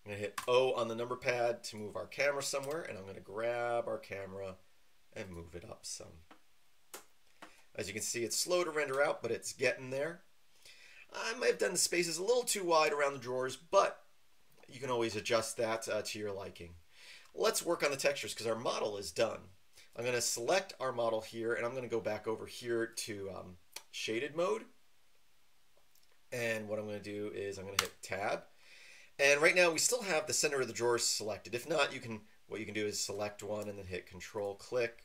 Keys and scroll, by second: 0.3 KP_0, 2.6 g, 27.8 Tab.